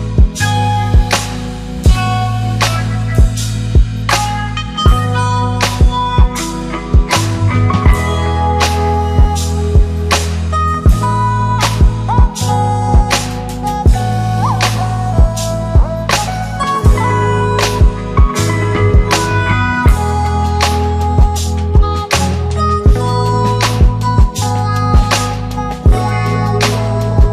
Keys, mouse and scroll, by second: 3.5 shift+click, 5.1 click, 7.2 click, 8.5 click, 12.4 shift+click, 12.8 s, 13.8 click, 14.1 shift+Up, 16.3 click, 16.6 shift+Right, 19.7 click, 24.4 click, 25.9-27.3 drag.